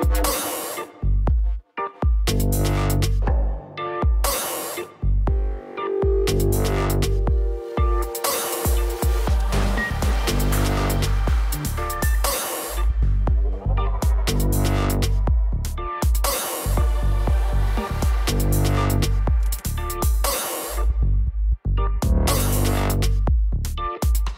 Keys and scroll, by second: 4.8 ctrl+s.